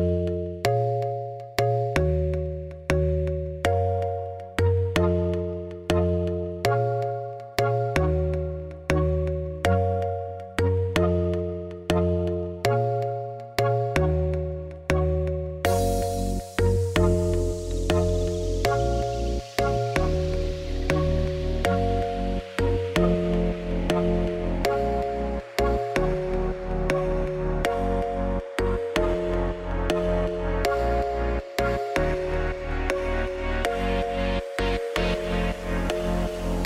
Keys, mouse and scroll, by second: 1.6 ctrl+p, 2.0 click, 2.2 scroll down 3, 2.3 middle click, 2.7 scroll up 1, 2.9 click, 3.1 middle click, 3.9 Tab, 4.5 Tab, 4.8 KP_3, 5.2 click, 5.4 Tab, 5.7 z, 6.1 click, 6.4 g, 7.7 Tab, 7.8 click, 8.3 g, 9.1 middle click, 9.3 z, 9.6 click, 9.8 scroll down 1, 10.0 middle click, 10.6 click, 10.8 middle click, 11.2 g, 11.8 r, 12.7 ], 13.1 alt+d, 13.9 r, 14.6 click, 14.9 ., 15.4 r, 16.9 g, 17.5 scroll down 2, 17.6 shift+middle click, 18.5 scroll up 1, 18.6 shift+middle click, 18.9 ctrl+s, 21.4 scroll up 1, 21.6 middle click, 21.8 click, 22.0 Tab, 22.1 2, 22.3 click, 22.5 shift+s, 22.7 Tab, 23.5 shift+a, 26.2 click, 26.8 Tab, 27.0 1, 27.1 s, 27.8 Tab, 27.9 scroll up 4, 28.1 middle click, 28.6 g, 30.0 Tab, 30.1 s, 30.7-32.1 middle drag, 32.9-34.1 drag.